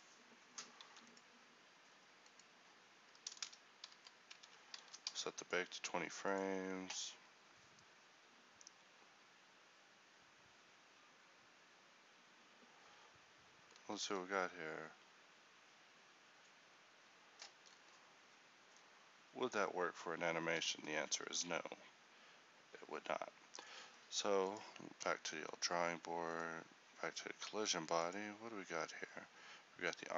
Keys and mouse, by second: 0.9 ctrl+s, 14.1 alt+a, 19.9-21.3 middle drag, 21.4 Escape, 24.6-30.1 drag.